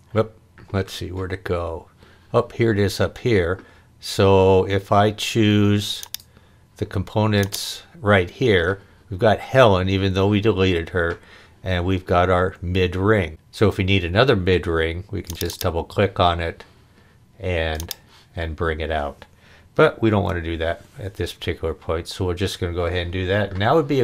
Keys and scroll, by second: 20.1 super+z.